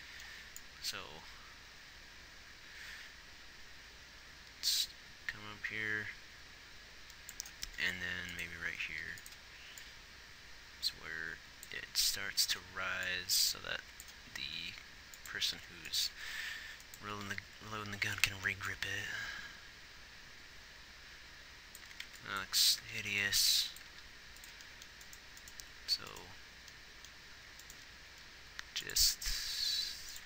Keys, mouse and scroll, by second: 7.8 g, 9.1 g, 9.9-13.1 drag, 14.6 click, 14.6 r, 15.6 r, 17.3 r, 18.7-20.4 drag, 22.9 g, 28.1 g, 29.6 g.